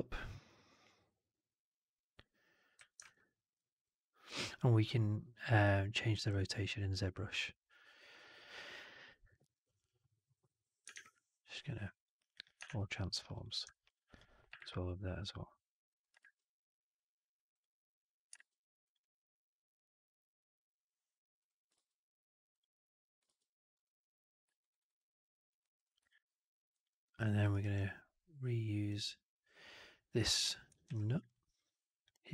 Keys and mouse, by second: 2.6 w, 2.9-3.4 alt+middle drag, 10.8 shift+Tab, 12.5 shift+Tab, 13.6 middle drag, 14.0 click, 14.7 shift+Tab, 16.3 shift+Tab, 21.3 click, 21.6 shift+Tab, 23.1 shift+Tab, 24.5 alt+right drag, 24.7 alt+right drag, 24.8-25.4 alt+drag, 25.6 click, 25.9-26.6 alt+drag, 26.8 alt+middle drag, 27.1 alt+middle click, 27.4 alt+right drag, 28.8 click, 30.8 ctrl+d.